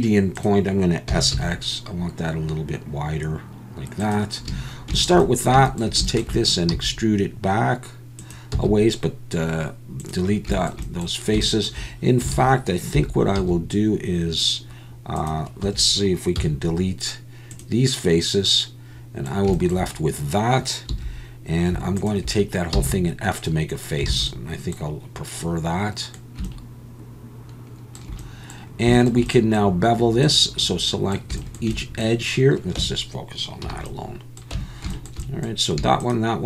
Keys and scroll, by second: 1.1 s, 1.3 x, 4.5 a, 6.7 e, 8.5 x, 12.3 alt+a, 12.9 3, 13.4 c, 15.6 Escape, 16.4 x, 20.9 2, 22.7 f, 24.1 alt+a, 32.8 Tab, 33.6 /, 34.5 Tab.